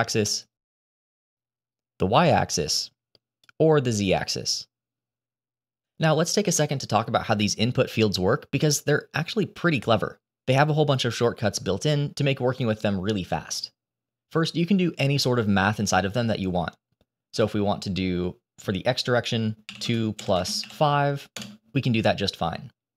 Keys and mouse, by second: 1.1-3.3 drag, 4.0-6.7 drag, 17.2-21.3 drag.